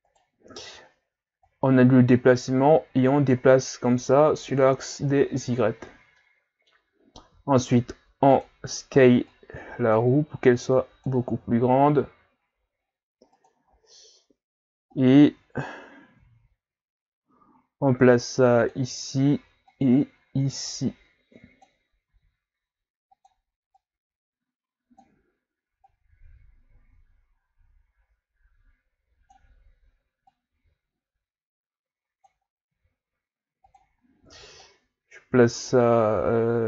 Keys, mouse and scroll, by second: 1.5 click, 4.8-5.3 scroll down 3, 5.6-6.1 scroll down 2, 6.1-7.3 middle drag, 7.3 s, 9.3 click, 11.5 s, 13.6-14.7 scroll up 4, 15.0 click, 19.7 click, 22.1 s, 23.8-28.8 drag, 30.3 click, 32.7 s, 34.6 click.